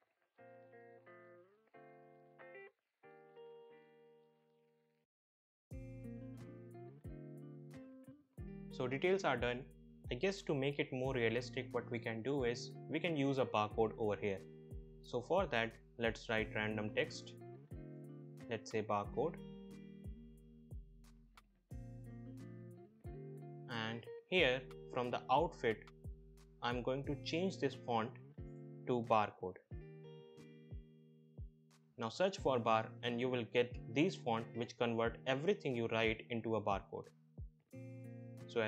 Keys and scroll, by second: 2.1 shift+Right, 2.5 shift+Right, 2.7 Left, 6.4 ctrl+c, 6.5 ctrl+v, 8.0 BackSpace, 17.7-19.9 typing, 29.6-31.4 typing.